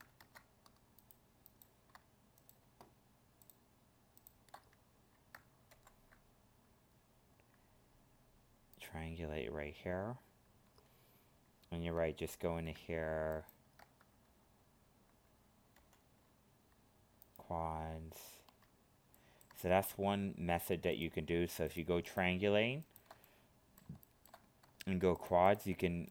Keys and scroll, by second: 0.2 ctrl+Tab, 5.8 ctrl+f, 15.8 ctrl+f.